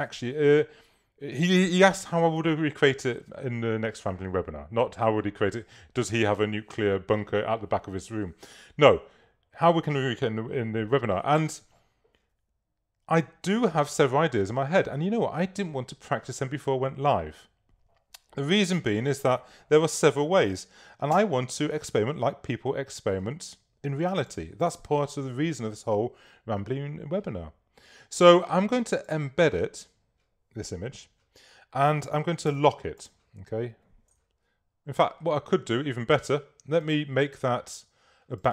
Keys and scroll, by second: 32.5 i.